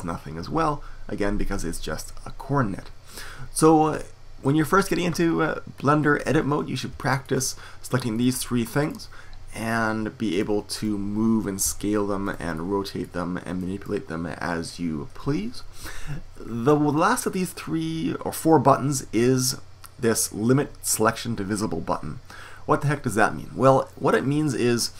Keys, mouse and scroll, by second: 5.7-8.1 middle drag, 8.1-10.7 drag, 11.6 s, 12.0 click, 12.5-13.5 right drag, 15.1 middle click.